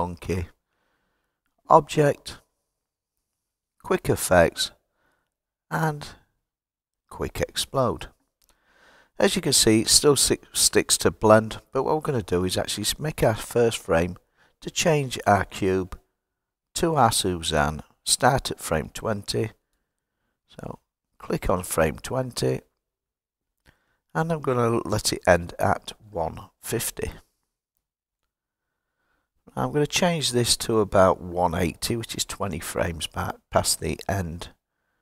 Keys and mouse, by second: 1.6-7.6 drag, 18.1-22.6 drag, 23.7-28.4 drag, 30.8-35.0 drag.